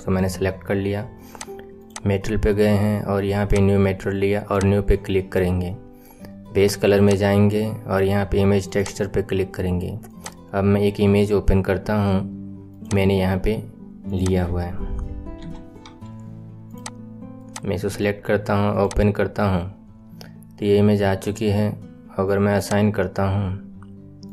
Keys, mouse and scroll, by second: 1.2 click, 1.8 click, 2.1-3.4 scroll up 10, 3.4-5.4 drag, 5.4-6.9 scroll down 2, 6.9-9.9 drag, 10.0-13.0 drag, 20.6-22.5 scroll up 5, 22.5-24.3 drag.